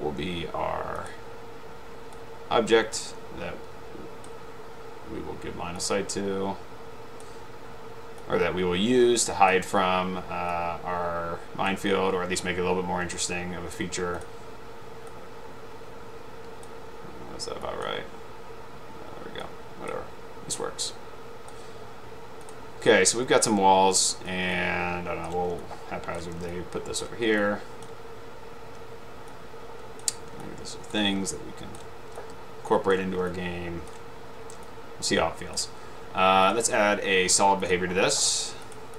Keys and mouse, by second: 1.2 click, 2.2-4.9 drag, 6.4-7.3 drag, 8.6-10.1 drag, 10.6-11.8 drag, 15.3-16.9 drag, 17.9 click, 19.6 click, 21.1-22.1 drag, 24.0 click, 25.1 ctrl+click, 25.7 ctrl+click, 26.6-27.1 ctrl+drag, 27.4-27.9 ctrl+drag, 29.9 ctrl+click, 30.5 ctrl+click, 31.4 ctrl+click, 32.3 ctrl+click, 33.7 ctrl+click, 34.8 ctrl+click, 38.8 click.